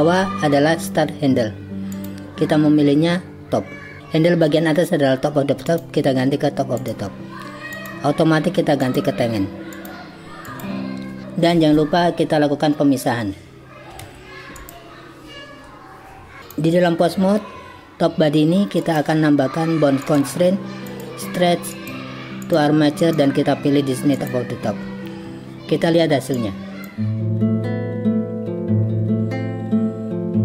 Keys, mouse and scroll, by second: 1.9-4.0 drag, 5.7-6.9 drag, 7.7-9.0 drag, 9.7-10.7 drag, 14.1 alt+p, 16.5 click, 18.8 click, 20.1-21.1 drag, 21.9 click, 23.0-24.3 drag, 26.4 click, 27.5 click, 27.9 g, 28.8 click, 29.3 g, 29.8 r, 29.9 z.